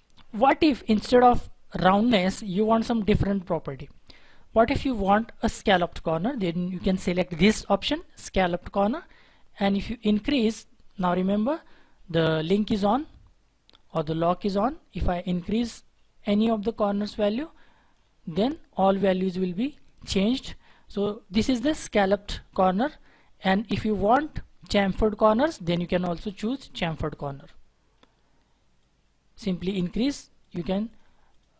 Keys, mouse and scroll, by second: 30.8 double click.